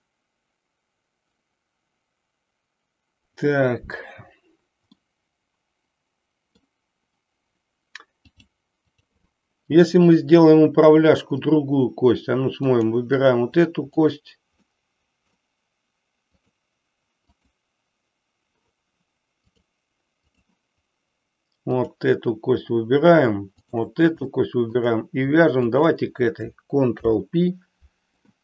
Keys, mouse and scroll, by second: 4.9-6.7 middle drag, 8.3 click, 12.8 click, 13.9 click, 14.8 middle click, 16.3 click, 17.4 click, 19.5 click, 21.6 click, 24.3 shift+middle click, 25.7 shift+click, 26.9 ctrl+p.